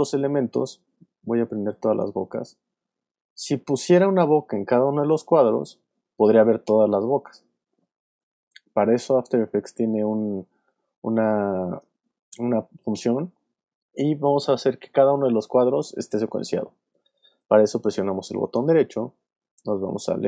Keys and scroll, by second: 8.1 super+z.